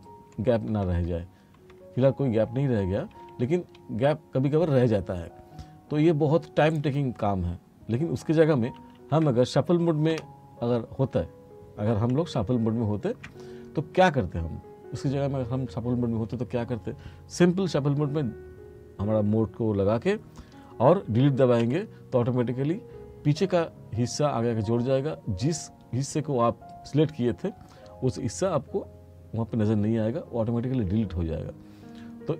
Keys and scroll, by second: 0.4 t, 6.0 r, 8.8 ctrl+z, 10.2 F1, 12.4 ctrl+z, 21.7 Delete.